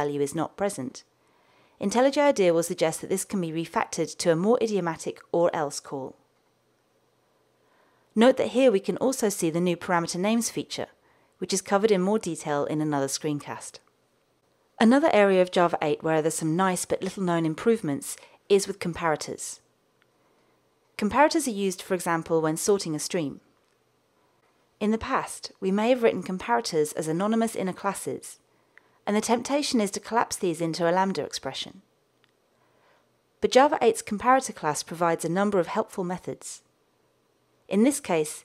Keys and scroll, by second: 1.1 alt+Return, 10.0 super+p, 17.9 super+p, 22.0 alt+Return, 29.1 super+z, 37.0 alt+Return.